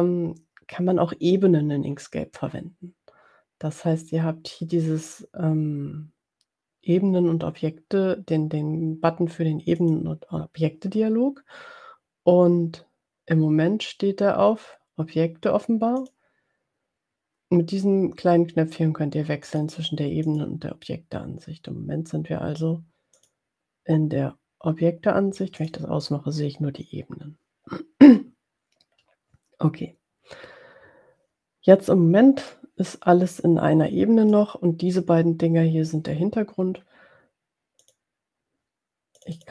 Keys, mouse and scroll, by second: 10.0 click, 16.2 click, 19.5 click, 20.3 click, 23.5 click, 25.6 click, 32.7-34.0 drag, 34.0 middle click, 37.8 click, 39.1 click.